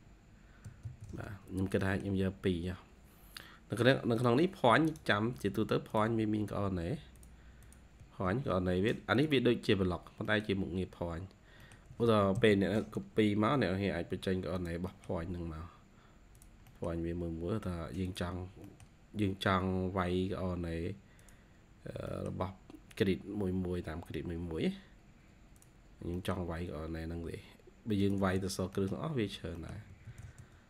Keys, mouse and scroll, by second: 0.1-1.3 typing, 1.4 scroll down 1, 1.7 middle click, 2.5-3.1 scroll down 1, 3.1 scroll up 2, 4.8 right click, 7.5 double click, 8.2 Escape, 8.4 Escape, 8.7-9.1 scroll up 1, 9.9 scroll down 1, 10.1 scroll up 1, 10.2 middle click, 11.5 middle click, 11.6 scroll down 1, 11.8-13.6 typing, 12.8 scroll up 1, 14.8 middle click, 15.0-16.0 scroll down 1, 16.6 middle click, 18.3 scroll down 1, 18.4 scroll up 1, 18.5 middle click, 19.1-19.5 scroll up 3, 20.4 scroll up 5, 21.5-21.9 scroll down 6, 22.0 middle click, 22.6-22.9 scroll up 2, 24.5-25.6 scroll up 5, 25.8 scroll down 7, 26.0 middle click, 26.6-27.2 scroll up 2, 28.1 space, 28.3-28.6 scroll down 1, 28.6 middle click, 29.5 middle click, 29.6-30.5 typing.